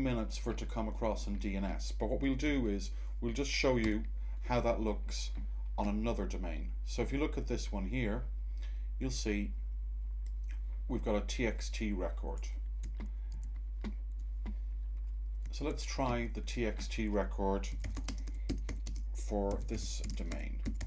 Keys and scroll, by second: 13.2 Tab, 15.5 super+Tab, 15.6 super+Tab, 17.4-20.8 typing.